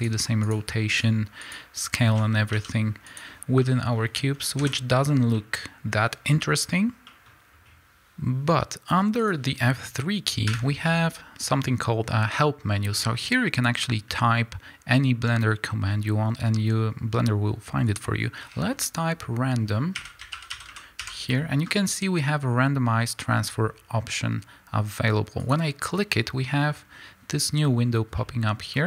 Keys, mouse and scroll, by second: 2.4 click, 2.5 g, 3.1 click, 3.5 middle click, 4.5 KP_Decimal, 5.3-6.5 middle drag, 6.5-7.0 scroll down 2, 7.0-7.9 middle drag, 7.9-25.5 drag, 28.2-28.8 middle drag.